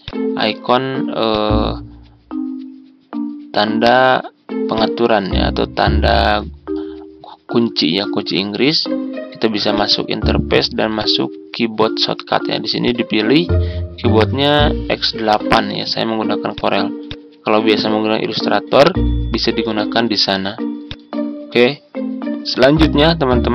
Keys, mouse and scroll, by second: 3.5-18.3 drag.